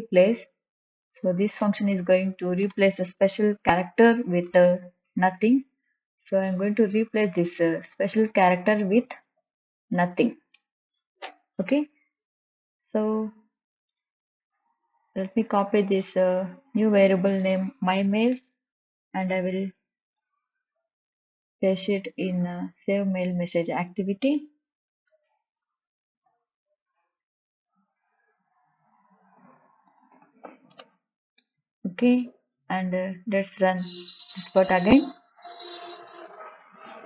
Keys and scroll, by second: 2.7 Down, 2.7 Return, 5.2 Left, 6.0 shift+', 8.1 Left, 9.3 shift+\, 20.8 ctrl+c, 26.0 ctrl+v, 31.9 BackSpace.